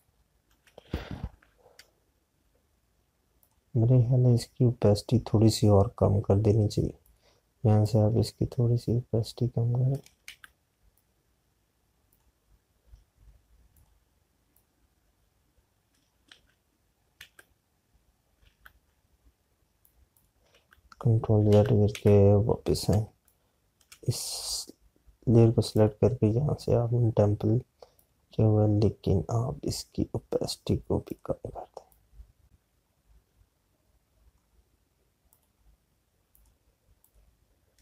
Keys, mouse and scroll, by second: 0.6 space, 1.0 click, 1.1 space, 4.3 click, 7.9 click, 11.1 ctrl+z, 11.8 click, 17.2 ctrl+z, 18.0 z, 19.3 z, 20.6 click, 21.4 z, 22.4 ctrl+z, 23.9 space, 24.1 click, 24.4 space, 25.3 click, 31.9 click.